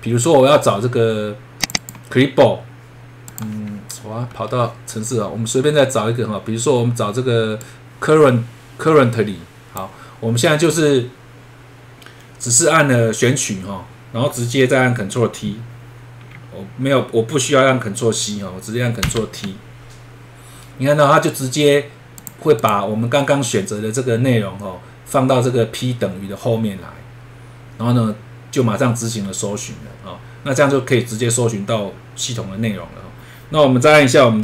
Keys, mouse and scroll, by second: 0.0-1.2 scroll down 1, 1.6 click, 1.8 click, 3.3 click, 3.8 scroll up 1, 7.6 click, 19.0 ctrl+Insert, 22.2 click, 22.6 click.